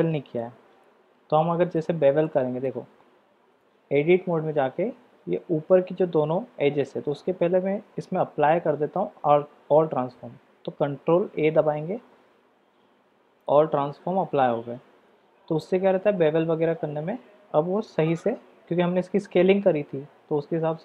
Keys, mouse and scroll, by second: 0.4-1.8 middle drag, 2.2-2.6 middle drag, 3.6 Tab, 7.1 Tab, 8.6 ctrl+a, 15.2 Tab, 18.1 alt+click.